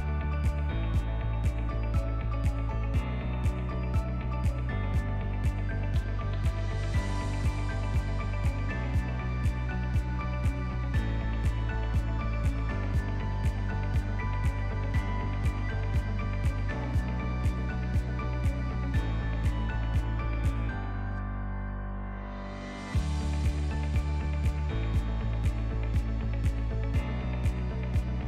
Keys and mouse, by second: 1.8 ctrl+r, 3.9 ctrl+b, 7.6 click, 8.7 Tab, 9.2-11.3 middle drag, 11.5-11.9 shift+middle drag, 12.4 Tab, 12.7 Tab, 13.0 middle drag, 13.5 ctrl+middle click, 13.9 ctrl+s, 14.2-14.6 middle drag, 14.9 middle drag, 15.9-16.3 shift+middle drag, 16.4-17.1 middle drag, 17.5 shift+middle click, 17.9 ctrl+middle click, 18.4 shift+middle drag, 18.8 shift+middle drag, 19.2 ctrl+middle drag, 19.5 shift+middle click, 19.9 drag, 20.4 shift+middle click, 20.9 Tab, 21.7 3, 22.0 click, 22.5 alt+click, 23.3 shift+d, 24.0 p, 24.9 Tab, 25.2 click, 25.8 s, 26.7 s.